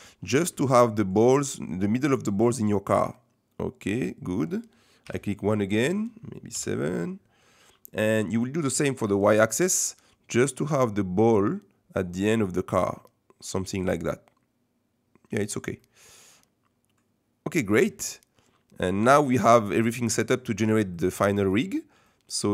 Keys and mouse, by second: 0.7 shift+middle click, 2.1-4.0 middle drag, 5.0 KP_1, 6.5 KP_7, 10.7-15.5 middle drag, 15.7-19.5 middle drag, 19.5 click, 19.9 middle click, 21.0 middle click, 22.1 middle click.